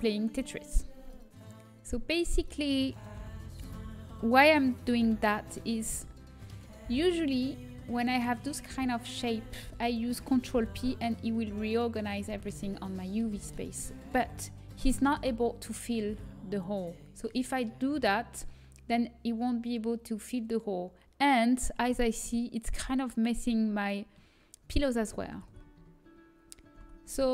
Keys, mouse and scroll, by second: 0.5 click, 5.7 l, 11.7 ctrl+p, 11.7 a, 21.8-25.2 middle drag, 25.2 ctrl+z, 26.8 a.